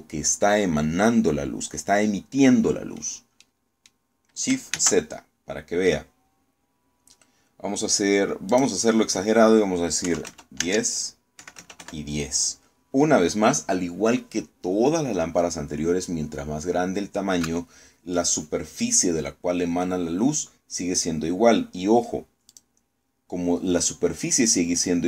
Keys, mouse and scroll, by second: 4.1 middle click, 4.2 scroll down 2, 5.4 shift+z, 9.2 click, 10.7 KP_1, 10.9 KP_0, 11.2 Tab, 12.0 KP_1, 12.2 KP_0, 12.4 KP_Enter, 23.2 click.